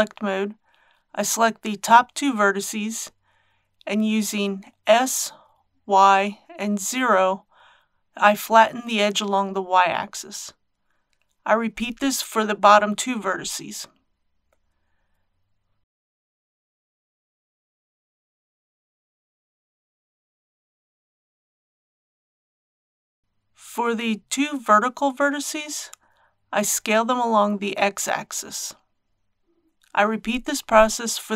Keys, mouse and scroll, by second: 0.3 shift+click, 4.2 s, 4.7 y, 5.6 KP_0, 13.6 click, 18.5 s, 19.3 y, 19.7 KP_0, 23.1 click, 24.3 shift+click, 25.3 shift+s, 25.6 shift+x, 26.0 KP_0, 29.5 click, 30.7 shift+click.